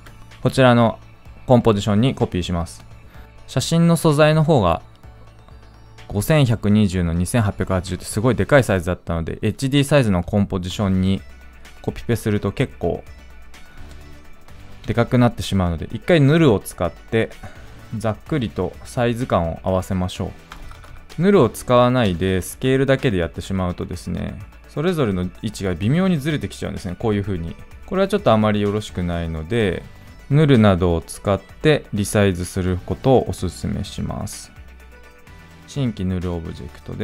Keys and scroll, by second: 20.9 ctrl+z, 27.7 ctrl+z.